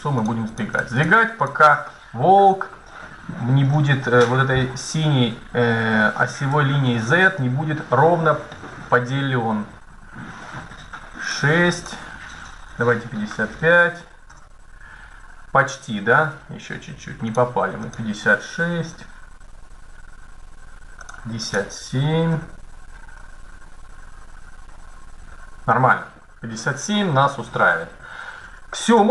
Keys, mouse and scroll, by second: 1.9 middle click, 2.9 click, 4.2-5.5 middle drag, 7.1-8.9 middle drag, 11.0-12.7 drag, 13.2 KP_5, 14.9 middle click, 17.0-18.8 drag, 20.7-22.5 drag, 26.3-27.7 middle drag.